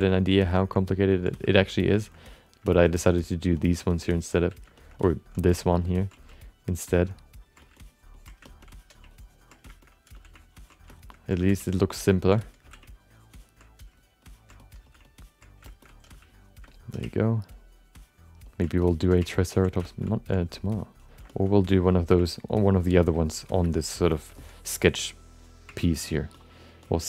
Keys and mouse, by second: 0.3 shift+click, 0.5 shift+middle click, 0.7 alt+middle click, 1.3 f, 1.5 click, 1.9 shift+middle click, 2.1 alt+middle click, 2.6 alt+shift+middle click, 2.9 alt+middle click, 3.6 alt+middle click, 3.9 alt+shift+middle click, 4.1 alt+middle click, 4.5 f, 4.8 alt+shift+middle click, 5.0 alt+middle click, 5.4 f, 5.8 ctrl+click, 6.3 ctrl+click, 6.9 f, 7.1 ctrl+click, 7.7 ctrl+click, 8.4 middle click, 8.6 middle click, 9.1 ctrl+click, 9.6 shift+middle click, 9.8 middle click, 10.1 f, 10.7 click, 10.9 alt+shift+middle click, 11.1 middle click, 11.6 ctrl+click, 11.9 ctrl+f, 12.0 ctrl+click, 12.4 alt+middle click, 12.6 f, 12.8 ctrl+click, 13.9 click, 14.2 click, 14.6 alt+middle click, 14.8 f, 15.1 click, 15.6 shift+middle click, 15.8 middle click, 16.1 f, 16.3 click, 16.7 alt+middle click, 17.0 ctrl+click, 17.5 ctrl+click, 18.8 alt+middle click, 19.3 ctrl+click, 19.8 shift+middle click, 20.0 alt+middle click, 20.4 click, 21.0 click, 21.3 alt+shift+middle click, 21.4 middle click, 21.8 click, 22.2 ctrl+click, 22.5 ctrl+click, 22.7 ctrl+click, 23.0 click, 23.3 click, 23.6 alt+shift+middle click, 24.1 shift+middle click, 25.4 click, 25.8 ctrl+click, 26.0 ctrl+click, 26.3 ctrl+click, 26.8 ctrl+click.